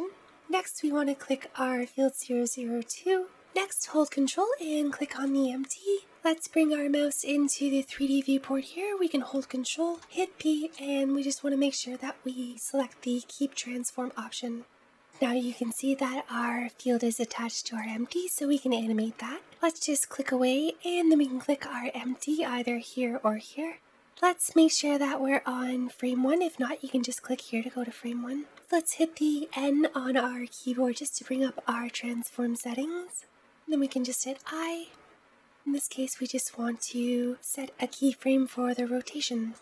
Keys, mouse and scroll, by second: 1.7 click, 3.3 click, 4.4 ctrl+click, 9.8 ctrl+p, 17.7 click, 20.9 click, 23.2-24.6 middle drag, 26.2-28.5 drag, 28.5 n, 30.3-31.4 scroll down 1, 31.4-33.3 scroll up 1.